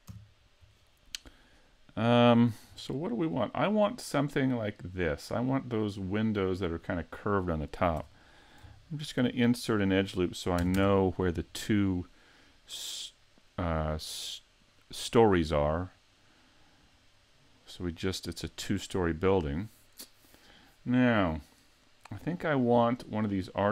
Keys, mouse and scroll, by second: 0.0 KP_Decimal, 1.4 middle click, 2.9 shift+middle click, 4.0-4.4 scroll down 2, 4.5 middle click, 5.9-6.2 scroll up 2, 6.4 middle click, 8.0 Tab, 9.3 ctrl+r, 11.8 middle click, 14.1 middle click, 15.0 middle click, 16.0 middle click, 18.3 middle click, 23.5-23.7 scroll down 2.